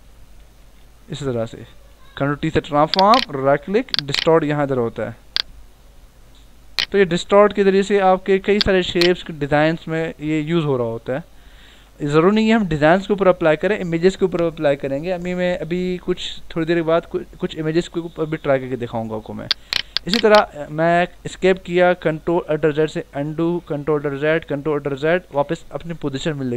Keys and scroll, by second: 0.6 Return, 2.4 ctrl+t, 7.3 Return, 8.4 v, 19.2 ctrl+t, 20.4 Escape, 22.4 ctrl+alt+z.